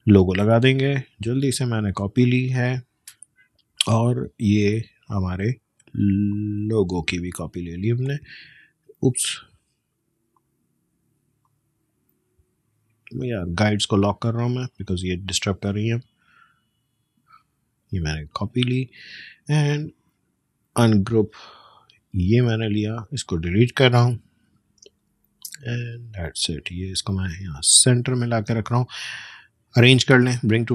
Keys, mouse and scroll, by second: 5.2-9.1 drag, 9.1 ctrl+z, 10.3 click, 13.7 right click, 14.8-18.5 drag, 18.5-19.0 alt+scroll up 1, 19.2 right click, 20.8 click, 24.2 BackSpace, 24.8 space, 24.9 click, 25.3 space, 25.8-27.5 drag, 27.5 space, 27.8 click, 28.0 space, 28.9 right click, 30.0-30.7 drag.